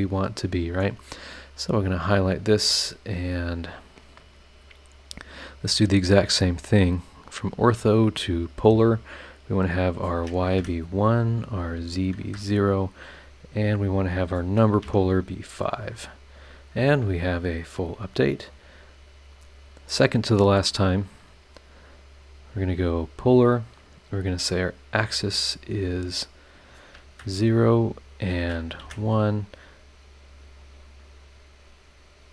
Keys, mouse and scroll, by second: 1.6 click, 2.3 click, 3.1 click, 4.6 scroll down 1, 6.6 click, 6.9 click, 7.3 click, 8.0 click, 9.6 click, 10.6 KP_1, 11.7 click, 12.2 KP_0, 12.8-13.6 scroll down 4, 14.1 click, 14.8 KP_5, 15.9 click, 16.8 scroll down 1, 17.3 scroll up 1, 17.6 scroll down 1, 18.1 scroll up 1, 18.5 click, 19.3 click, 21.8 click, 22.2 click, 23.0 click, 24.3 click, 25.0 click, 25.8 click, 26.6 click, 27.0 KP_0, 28.1 click, 28.8 KP_1, 29.3 scroll down 1, 29.9-30.9 scroll up 2, 31.0 scroll down 1, 31.5 scroll down 1, 31.8-32.1 scroll up 2.